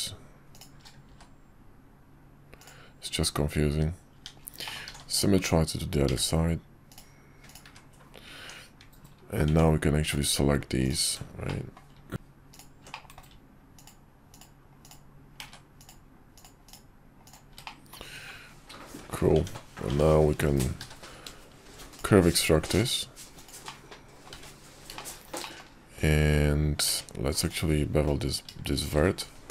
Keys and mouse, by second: 0.5 alt+shift+click, 1.0 x, 4.1 Tab, 4.6 middle click, 4.9 alt+x, 7.4 click, 7.6 `, 8.4 Tab, 9.5 Tab, 10.0 click, 11.4 middle click, 12.9 middle click, 14.3-15.4 ctrl+drag, 15.4 ctrl+z, 15.8 ctrl+click, 17.2 ctrl+click, 17.6 middle click, 18.9 `, 19.3 Tab, 19.9 Tab, 20.8 q, 23.6 middle click, 24.5 `, 24.9 shift+middle click, 25.4 middle drag, 26.8 Tab, 28.9 ctrl+shift+b.